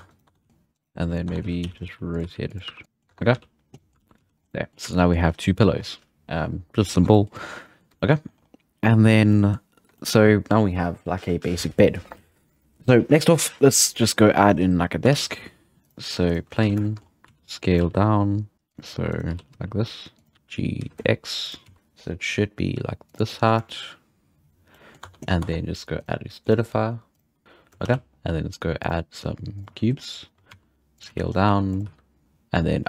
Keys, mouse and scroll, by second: 0.1 right click, 0.3 Tab, 0.4-4.2 typing, 0.5 middle drag, 0.7 right click, 1.3 Tab, 1.7 scroll up 4, 2.8 middle click, 3.1 Tab, 3.5 scroll down 1, 3.7 middle click, 4.0 alt+a, 4.3 scroll down 1, 4.5-5.2 middle drag, 5.2-5.6 scroll up 3, 7.1 shift+middle drag, 7.4 scroll down 4, 7.6-8.2 middle drag, 8.2-8.8 scroll up 4, 8.8-9.3 scroll down 3, 9.3-14.1 middle drag, 14.5 scroll up 3, 15.1 shift+a, 16.5-16.8 scroll down 4, 16.6 z, 16.8 shift+middle click, 17.0 scroll up 1, 17.3 s, 17.8 g, 19.0 2, 19.1 right click, 19.3 g, 20.3 a, 20.3 g, 21.6 s, 21.7 g, 23.3-24.6 middle drag, 24.6 scroll down 2, 24.7 middle click, 25.0 Tab, 25.2 scroll up 1, 25.4 Tab, 25.9 click, 26.4-27.4 drag, 27.4-27.8 shift+middle drag, 27.8 shift+a, 30.3 scroll down 5, 30.5 s, 31.1 z, 31.3-31.8 scroll up 6, 31.4 s, 31.8 g.